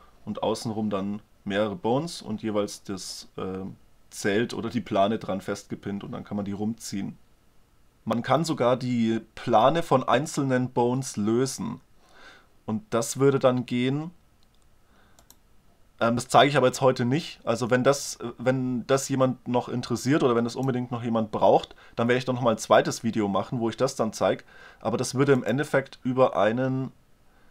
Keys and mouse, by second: 15.2-17.0 drag, 17.0 middle click, 18.1-19.1 drag, 19.1 middle click, 25.3-26.9 middle drag, 26.9 click.